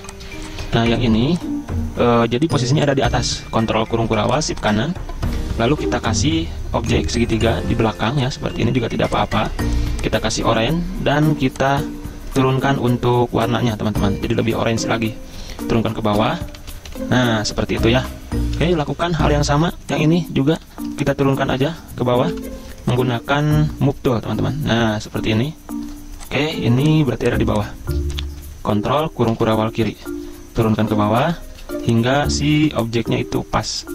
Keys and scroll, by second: 0.0 z, 0.7 v, 2.8-5.8 typing, 9.8 i, 10.6 v, 14.6 v, 16.0 ctrl+[, 16.2 ctrl+[, 16.4 ctrl+[, 16.6 ctrl+[, 16.7 ctrl+[, 18.5 z, 19.4 v, 21.6 ctrl+z, 22.3 v, 28.2 ctrl+[, 29.3 ctrl+[, 29.4 ctrl+[, 29.6 ctrl+[, 30.7 Down, 30.9 Down, 31.0 Down, 31.6 z, 32.6 v.